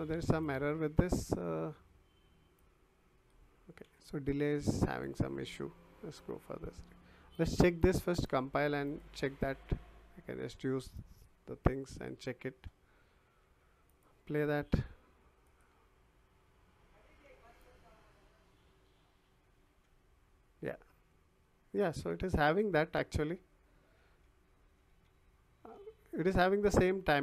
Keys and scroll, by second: 3.8 Delete, 17.9 w, 23.1 w.